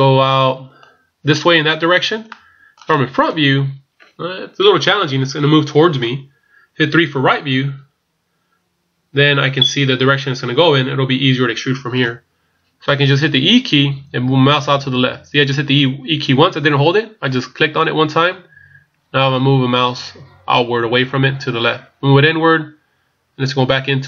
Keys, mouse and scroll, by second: 0.0 middle click, 2.3 middle click, 3.2 KP_1, 7.0 KP_3, 13.7 e.